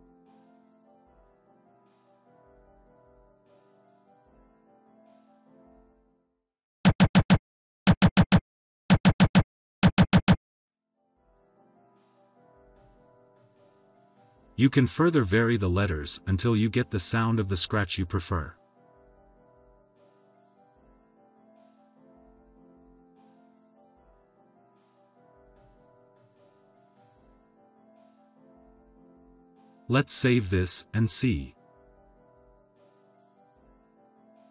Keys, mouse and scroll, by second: 0.3-2.7 typing, 5.4 click, 6.7 click, 7.8 click, 14.2 BackSpace, 15.1 d, 15.7 click, 16.1 BackSpace, 16.8 d, 18.3 click, 18.7 BackSpace, 20.5 d, 29.9 a, 32.0 click.